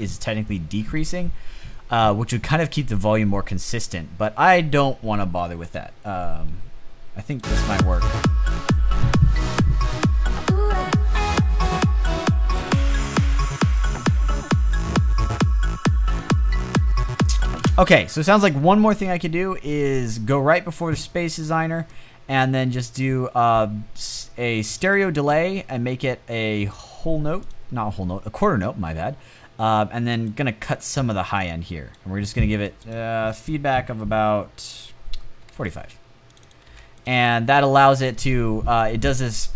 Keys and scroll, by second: 17.2 space, 34.8-36.2 typing.